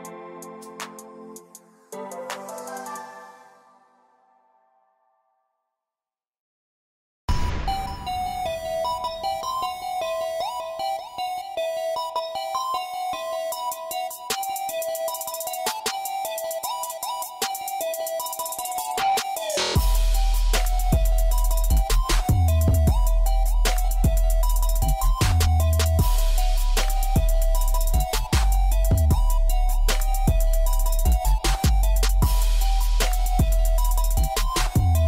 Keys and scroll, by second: 7.2 v, 8.2 f, 16.4 5, 16.6 Return, 22.7 j.